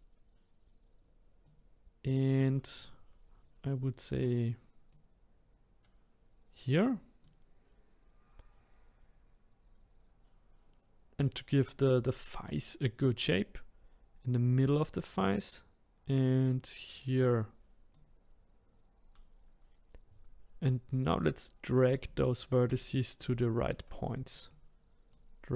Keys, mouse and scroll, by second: 4.9-7.9 drag, 12.6-14.6 scroll up 1, 14.6-19.5 drag, 21.1-22.2 drag, 22.2 shift+middle click, 22.9-23.4 scroll up 1, 23.4-24.5 shift+middle drag, 24.5 click.